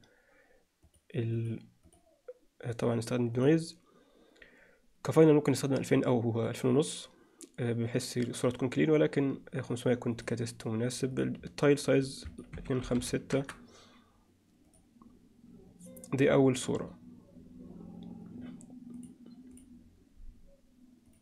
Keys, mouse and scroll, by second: 0.9 click, 1.4-2.0 drag, 3.4 click, 10.2 click, 12.4-13.8 drag, 14.7 click, 19.1-21.2 drag.